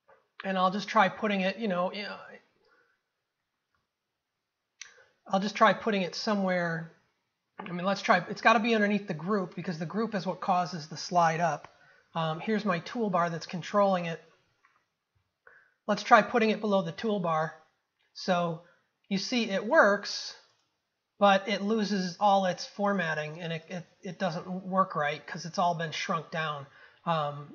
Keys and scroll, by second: 15.2 ctrl+v.